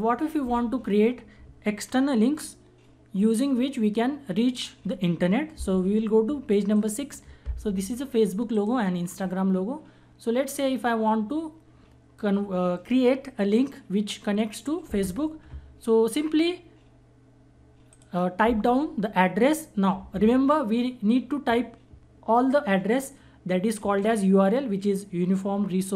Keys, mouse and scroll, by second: 6.3 click, 17.4 click.